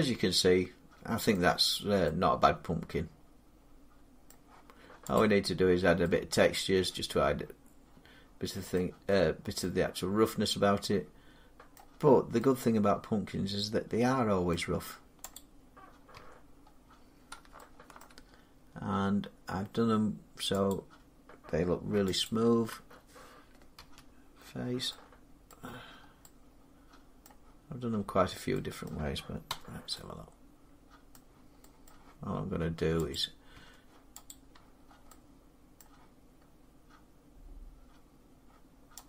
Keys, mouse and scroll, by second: 0.1 scroll up 2, 1.1 middle click, 1.4-1.9 scroll down 1, 4.1 middle click, 5.0 click, 5.0-5.9 scroll down 1, 8.6 middle click, 9.2 scroll up 1, 11.6-12.0 scroll up 2, 12.8 scroll down 1, 14.3 middle click, 15.2 click, 16.0 Tab, 16.5-17.0 scroll up 3, 17.8 shift+middle click, 18.1 scroll up 2, 20.5 click, 21.6 shift+middle click, 22.1 alt+click, 23.6 f, 24.4 middle click, 24.5 middle click, 25.0-25.8 scroll down 6, 25.5 middle click, 26.9 scroll, 27.0 middle click, 27.6 middle click, 27.7-28.3 scroll, 28.7 middle click, 29.3 Tab, 29.3 middle click, 30.9 middle click, 31.7 middle click, 32.4 Tab, 33.0 click, 33.4 Tab, 34.1 click, 34.7 middle click, 34.7 middle click, 35.6 middle click, 36.2 middle click, 36.3 middle click, 36.3-38.9 scroll, 38.9 click.